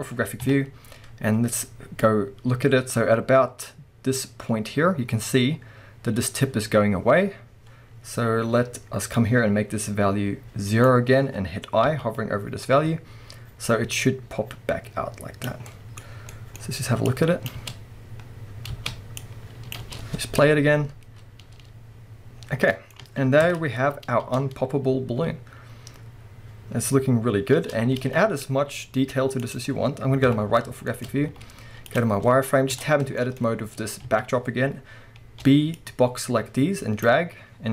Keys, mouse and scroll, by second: 0.4 KP_3, 1.0-2.0 scroll up 2, 2.0-15.7 drag, 5.1-6.8 scroll up 2, 6.8-9.2 scroll up 1, 12.9-13.7 scroll down 2, 15.6-16.3 scroll down 4, 15.7-17.1 middle drag, 16.6-17.1 scroll up 2, 17.1-22.7 drag, 17.6 space, 18.7 space, 19.8 space, 19.9 space, 20.2-20.6 scroll down 1, 20.6-21.6 scroll up 1, 22.4 scroll down 1, 22.7 middle click, 23.0 space, 23.5 KP_0, 24.2 space, 26.9 scroll up 1, 27.6 space, 28.0 alt+a, 28.1 alt+scroll down 1, 28.7-29.4 middle drag, 28.8-29.4 scroll down 2, 29.4 click, 30.3 KP_3, 30.9-37.7 shift+middle drag, 31.1 scroll up 2, 31.3 z, 32.7 b, 34.1 shift+a, 37.5-37.7 scroll up 2.